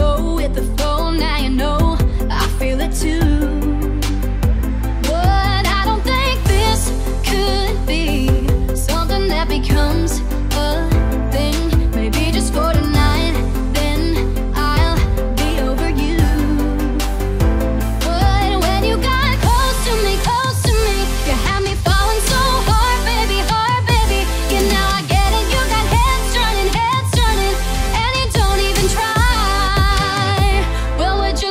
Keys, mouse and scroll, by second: 0.5 right click, 0.6-3.8 drag, 3.8 v, 3.9 click, 4.6 alt+click, 5.0 alt+shift+click, 6.4 alt+click, 6.7 ctrl+z, 6.8 click, 7.1 alt+click, 8.2 Down, 8.9 alt+click, 9.5 ctrl+z, 9.7 alt+shift+click, 10.2 Right, 10.9 click, 11.1-11.7 alt+scroll down 2, 12.1 click, 12.9 alt+scroll up 1, 13.7 alt+shift+click, 14.5 click, 14.7 scroll down 1, 15.9 click, 16.5-17.9 typing, 17.8 click, 18.2 alt+scroll up 1, 18.3-18.7 alt+scroll down 2, 19.5 alt+scroll up 1, 19.7 alt+shift+click, 21.8 alt+click, 22.2-23.7 typing, 22.5 click, 24.6 click, 28.3-28.7 alt+scroll down 1, 29.6-30.0 ctrl+scroll down 2, 30.1-30.5 scroll up 1, 30.6 click.